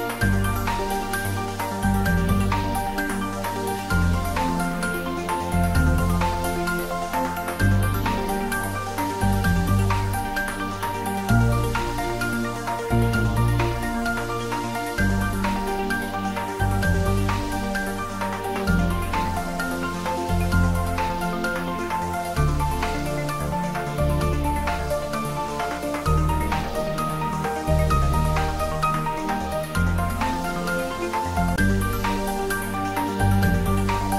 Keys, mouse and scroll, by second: 3.4-6.8 scroll up 1, 9.7 Tab, 10.5-11.8 scroll up 1, 12.3 ctrl+r, 18.0 click, 18.5 scroll down 1, 18.8 middle click, 19.2 click, 19.5-20.0 scroll up 1, 20.0-20.7 middle drag, 21.5 ctrl+z, 23.2 ctrl+z, 24.9 ctrl+r, 26.2 click, 28.4 click, 29.0 shift+click, 31.8 ctrl+b.